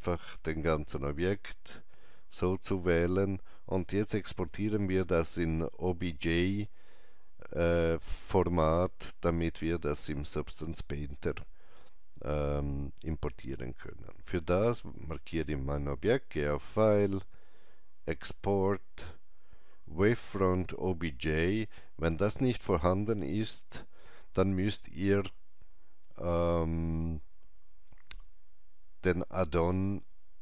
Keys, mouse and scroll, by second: 0.1 click, 16.3 click.